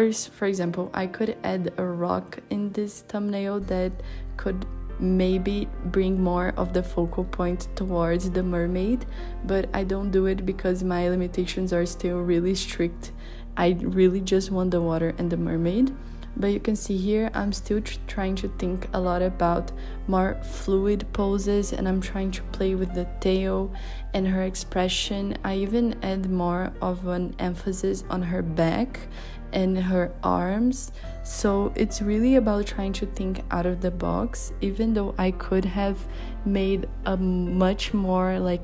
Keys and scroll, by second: 5.5 z, 6.5 z, 7.3 b, 16.9 b, 19.9-21.2 typing, 23.4 b, 28.3 b, 33.8 i, 34.6 super+z, 37.8 ].